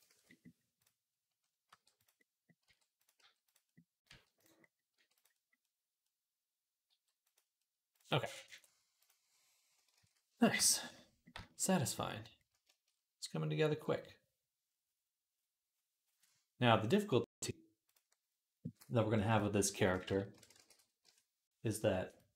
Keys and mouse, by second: 0.0 ctrl+s, 1.5-4.8 typing, 5.4-7.7 middle drag, 6.7 g, 7.7 click, 8.0 middle click, 8.8-22.3 drag, 9.9 ctrl+s.